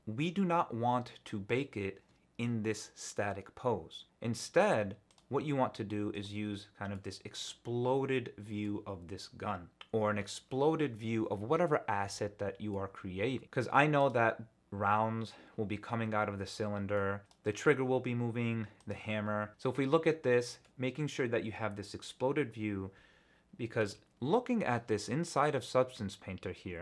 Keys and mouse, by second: 5.1 click, 6.1 click, 6.9-8.6 middle drag, 12.7-13.6 middle drag, 16.9 middle drag, 17.2 click, 18.8 click, 19.5-20.6 middle drag.